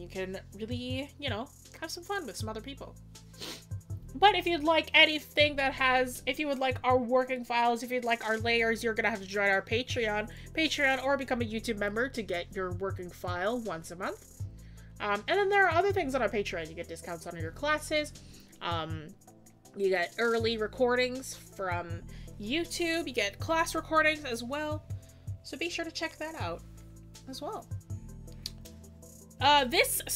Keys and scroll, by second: 11.8-12.2 scroll down 1.